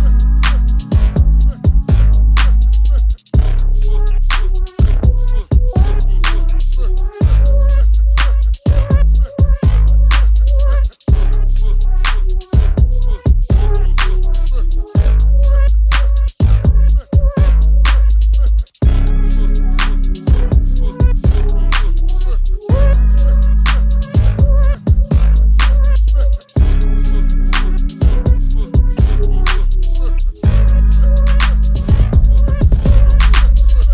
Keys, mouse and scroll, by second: 32.9 click.